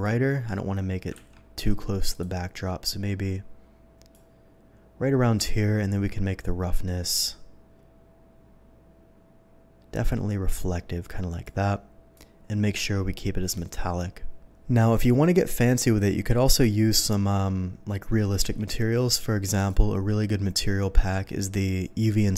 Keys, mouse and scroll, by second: 1.1 ctrl+z, 2.0 click, 2.8-4.1 drag, 6.4-11.4 drag, 12.1-13.6 drag, 15.8 click, 18.4 n, 19.5 click.